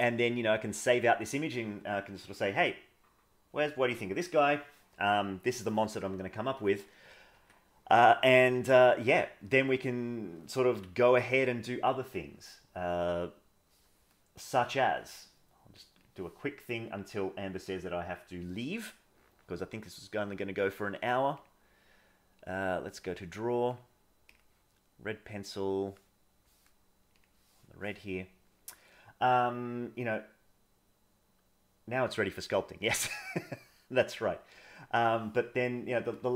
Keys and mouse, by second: 7.4 Escape, 10.7 KP_1, 12.2-12.8 middle drag, 13.4 middle click, 19.4-20.4 middle drag, 21.4-23.1 drag, 23.8 click, 28.4 middle click, 32.6 middle click, 34.6 click.